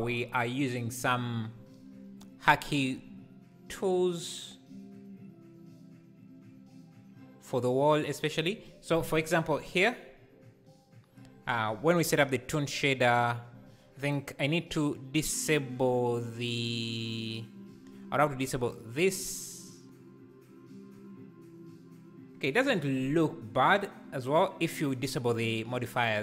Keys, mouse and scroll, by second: 12.3 KP_0, 14.4 click, 16.0-16.6 scroll down 2, 17.0 click, 18.7 click.